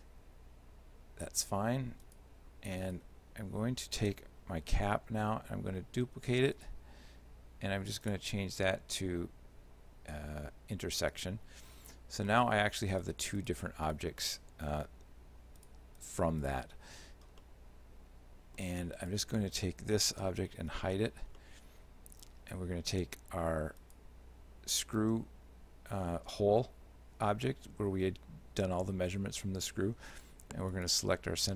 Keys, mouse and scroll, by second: 2.1 right click, 2.9 right click, 4.9 shift+d, 8.1 click, 12.3 right click, 13.0 right click, 13.4 right click, 13.9 right click, 14.3 right click, 15.6 right click, 16.0 right click, 16.5 right click, 17.4 shift+middle click, 19.0 right click, 20.7 h, 21.4 shift+middle click, 23.8 right click, 30.8 shift+right click.